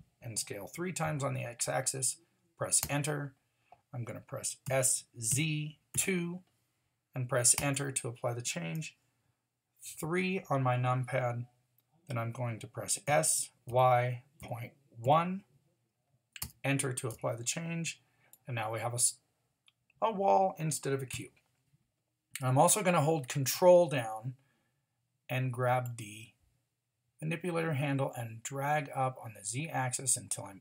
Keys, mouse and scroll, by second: 4.6 s, 10.0 KP_3, 13.1 s, 18.3 middle drag, 18.7-19.3 middle drag, 19.7 middle drag, 20.1 middle drag, 21.1 KP_1, 26.5-30.6 drag.